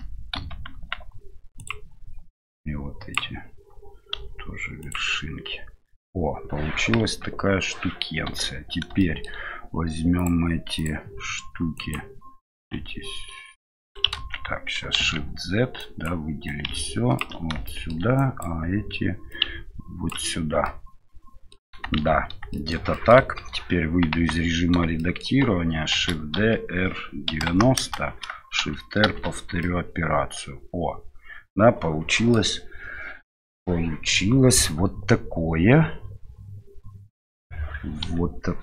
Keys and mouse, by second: 0.7 x, 2.4 click, 4.1 x, 7.0 KP_3, 8.3 1, 9.0 shift+middle click, 10.2-11.1 drag, 11.8 click, 12.6-13.9 ctrl+drag, 14.2 ctrl+z, 15.0 shift+z, 15.8 click, 16.5 ctrl+click, 17.7 middle click, 18.3 click, 19.3 ctrl+click, 20.7 middle click, 22.0 shift+z, 22.5 shift+middle click, 22.9 middle click, 23.2 KP_7, 24.2 Tab, 25.0 shift+middle click, 25.9 shift+d, 29.6-32.4 middle drag, 38.2 KP_7.